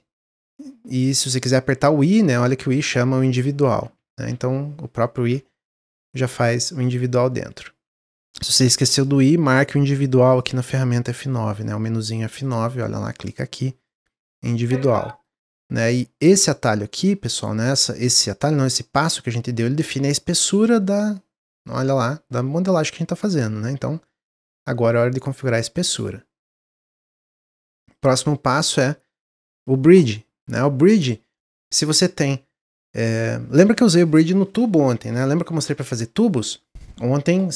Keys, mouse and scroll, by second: 10.4 click, 10.6 click, 11.0 click, 11.3 click, 11.5 click, 12.3-13.9 drag, 14.7-17.2 middle drag, 17.2-20.2 drag, 27.8 click, 28.2-29.5 middle drag, 29.5 click, 30.4-33.5 middle drag.